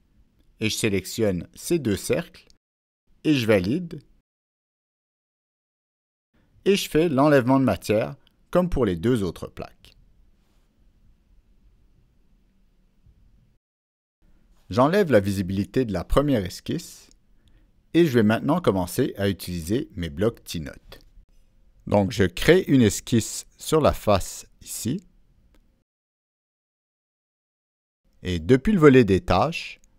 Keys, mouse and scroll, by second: 1.2 click, 2.8 click, 3.7 click, 6.9 middle click, 6.9 click, 8.1 click, 8.6 click, 9.4 click, 13.2 click, 14.9 click, 16.1 click, 19.4 click, 21.9 click, 23.2 click.